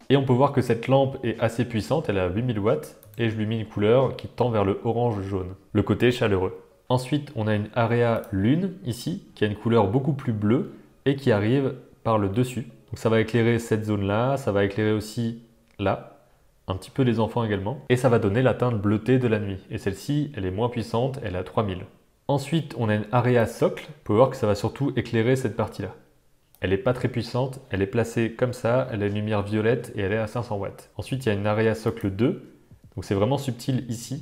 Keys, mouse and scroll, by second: 8.1 drag, 8.8 click, 22.2 alt+a, 23.3 click, 31.8 click.